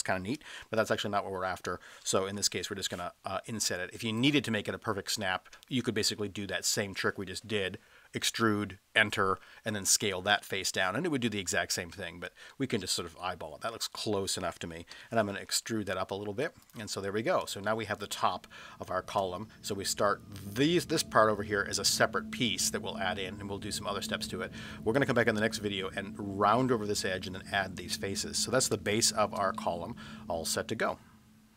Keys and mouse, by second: 0.9 ctrl+z, 2.4 i, 4.2 click, 12.5-14.1 middle drag, 14.9 e, 16.6 click, 17.5 space, 19.1 space, 27.9-28.3 middle drag, 28.9 space, 29.5-29.9 middle drag.